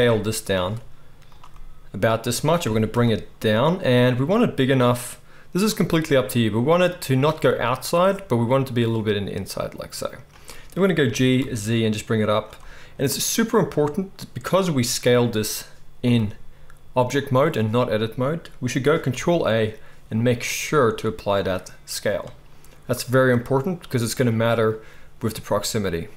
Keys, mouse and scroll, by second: 1.2 s, 2.6 g, 4.1 s, 7.3 s, 11.0 g, 16.0 g, 17.1-26.1 middle drag, 19.1 ctrl+a.